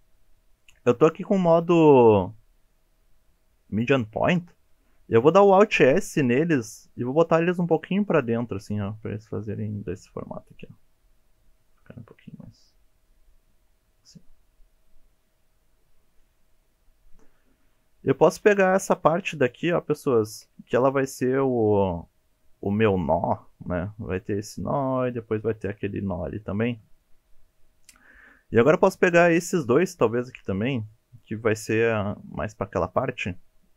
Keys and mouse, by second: 1.6 click, 5.6 alt+s, 10.5 click, 18.4 3, 19.2 shift+click, 19.7 shift+click, 20.7 middle click, 27.0-28.1 middle drag, 28.6 shift+click, 29.4 shift+click, 30.2 middle click, 33.3-33.7 middle drag.